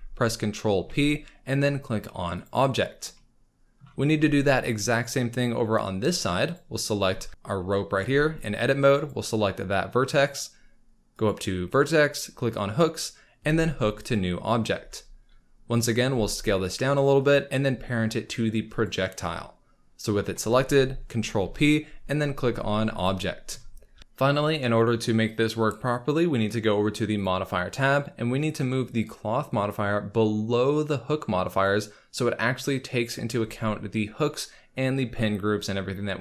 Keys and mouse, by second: 0.7 ctrl+p, 6.5 click, 7.9 Tab, 9.0 click, 11.2-14.1 drag, 14.7 Tab, 15.7 click, 16.1 s, 18.8 shift+click, 21.4 ctrl+p, 29.6-31.7 drag.